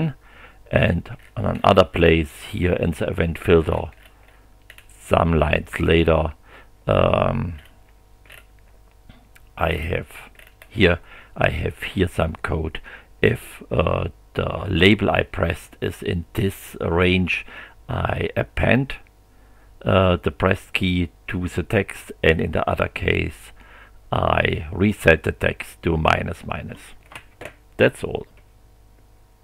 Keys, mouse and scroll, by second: 0.8-3.4 scroll down 6, 3.4-4.4 scroll down 7, 4.4-5.0 scroll up 4, 7.6 scroll down 2, 8.3 scroll up 2, 9.7 scroll up 2, 10.4-10.8 scroll up 2.